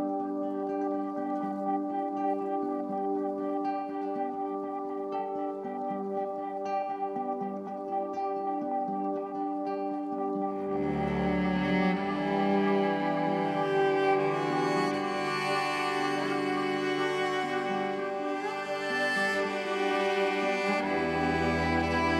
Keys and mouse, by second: 0.0-7.7 drag, 7.7 ctrl+z, 9.7 click, 10.6 r, 10.9 x, 11.0 x, 14.0 Escape, 15.3 click, 15.6 click, 17.4 1, 17.8 click, 19.0 click, 20.4 click.